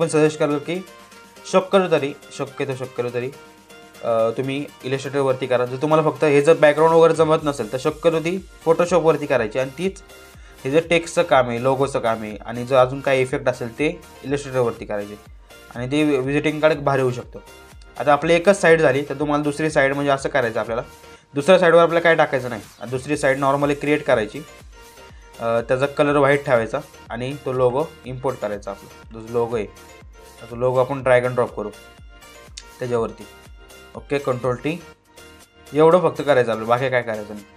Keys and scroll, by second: 33.8 ctrl+t.